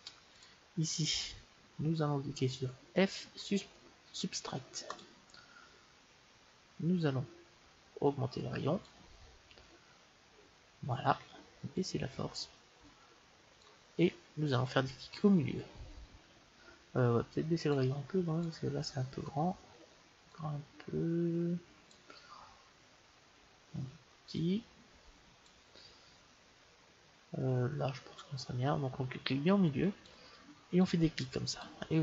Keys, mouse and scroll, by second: 0.3-2.2 drag, 8.0-9.9 drag, 11.7-13.6 drag, 17.6-19.6 drag, 20.2-22.2 drag, 24.3-26.1 drag, 29.9-32.0 drag.